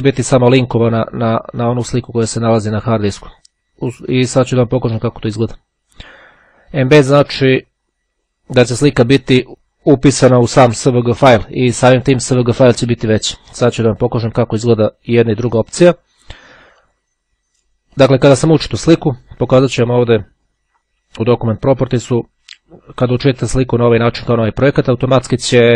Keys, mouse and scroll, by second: 16.8 click, 18.1 click, 19.8 click, 21.8 click.